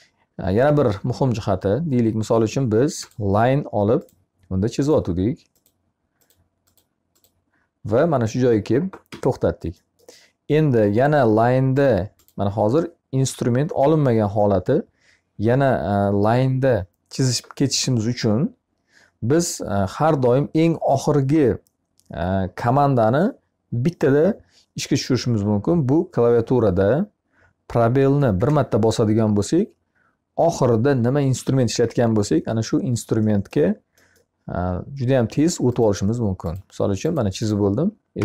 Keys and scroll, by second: 8.5 Escape, 27.7 space, 37.6 Escape.